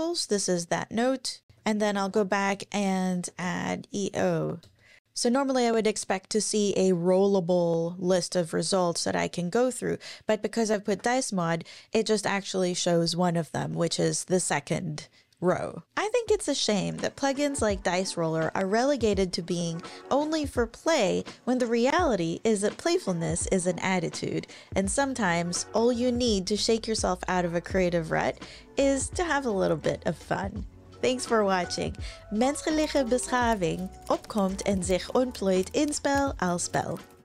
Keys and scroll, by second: 1.5 Left, 2.1-3.9 typing, 4.6 Return, 10.9 Page_Up.